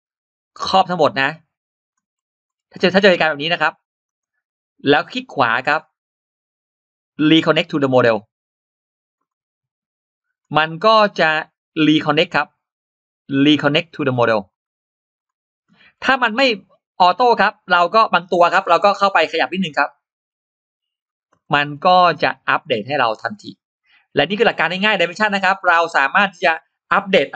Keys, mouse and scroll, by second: 0.4-1.7 drag, 2.0 scroll up 2, 2.3-2.7 scroll down 2, 3.0 click, 4.1-4.7 scroll up 4, 5.3 right click, 7.8 click, 10.1 click, 10.4-10.7 scroll down 2, 11.0 scroll up 2, 12.5 right click, 14.3 click, 15.0 click, 15.8-16.1 scroll down 2, 16.2-16.6 scroll up 2, 17.1 click, 17.4 click, 18.2 scroll up 2, 19.3-20.8 drag, 21.2 click, 21.5-22.2 scroll down 4, 22.3 click, 22.7-23.4 scroll up 2, 24.2 scroll down 2, 24.9-25.6 scroll up 4.